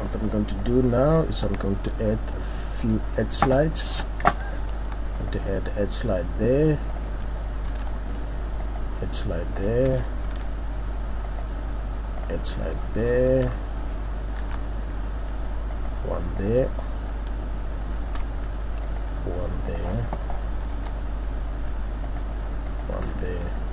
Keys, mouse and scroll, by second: 0.6 click, 1.0-2.0 scroll up 7, 2.0-2.4 shift+scroll down 4, 3.5-4.0 shift+scroll up 5, 7.0 click, 7.7 ctrl+r, 9.6 click, 10.2 ctrl+r, 12.2 click, 12.8-13.9 scroll down 5, 13.4-14.1 scroll up 3, 14.4 ctrl+r, 16.4 click, 17.9 ctrl+r, 19.7 click, 20.7 ctrl+r, 22.8 click, 23.0-23.7 scroll down 2.